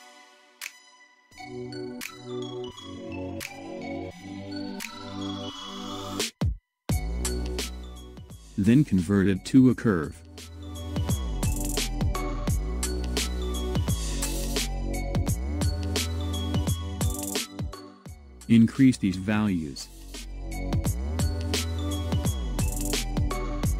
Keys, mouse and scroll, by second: 5.4-8.4 middle drag, 9.3-12.3 drag, 13.8-16.8 middle drag, 17.9-18.2 scroll down 14, 19.5-22.6 drag.